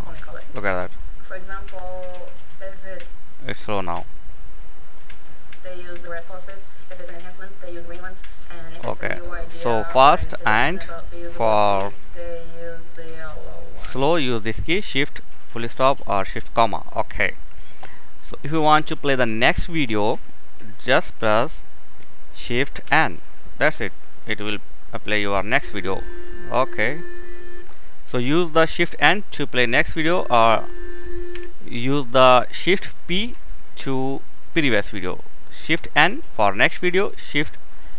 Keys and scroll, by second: 4.5 shift+., 7.6 shift+,, 11.3 shift+,, 13.4 k, 22.3 shift+n, 30.9 k.